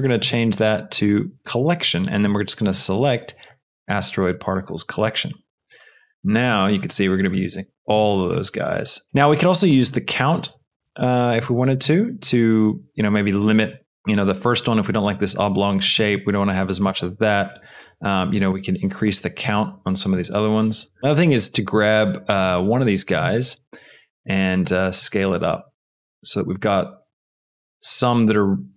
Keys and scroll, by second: 25.0 shift+s.